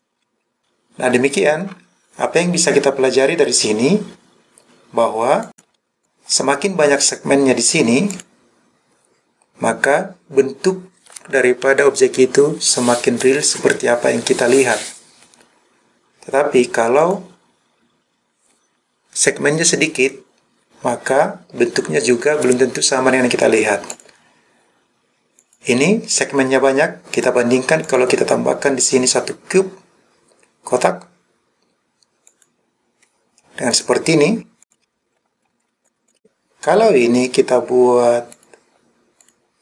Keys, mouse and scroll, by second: 5.5 click, 6.0 click, 8.2 click, 17.1 click, 24.0 click, 25.4 click, 27.2 click, 27.9-32.5 drag, 33.8 click, 34.7 click, 35.1 scroll down 2, 35.8 click, 36.0 click, 38.4 click, 39.3-39.6 drag.